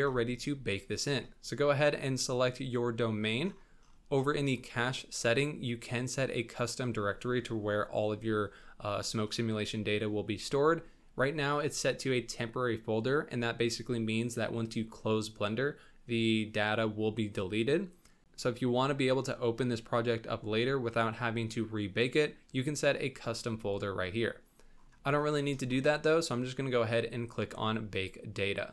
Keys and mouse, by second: 2.1 click.